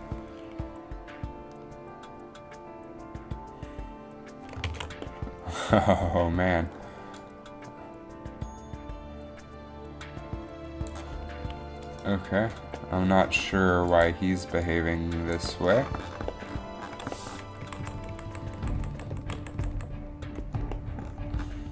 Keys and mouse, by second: 4.9 alt+a, 7.3 click, 14.0-16.0 drag, 17.8 Left, 18.2-19.5 Left, 19.7 Left, 19.9 Left.